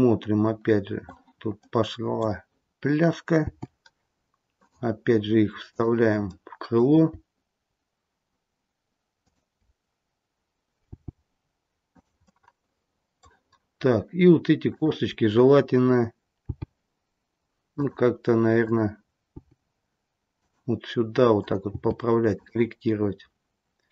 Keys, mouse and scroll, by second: 3.3 g, 5.6 click, 6.2 middle click, 9.1 shift+click, 10.9 g, 12.2 middle click, 13.5-13.9 scroll up 2, 14.7 click, 16.3 g, 18.5 click, 19.3 g, 21.2 click, 21.6 g.